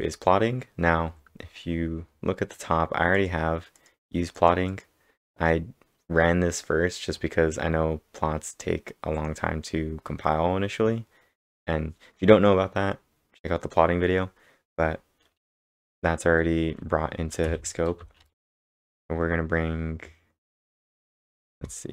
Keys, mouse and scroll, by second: 0.4 scroll down 6, 0.8 scroll up 2, 1.7 scroll up 5, 3.1 click, 3.8 click, 4.4 click, 7.0 scroll down 7, 8.9-9.6 typing, 9.1 click, 9.1 scroll up 1, 17.2-18.8 typing, 17.5 click, 17.5 scroll up 1.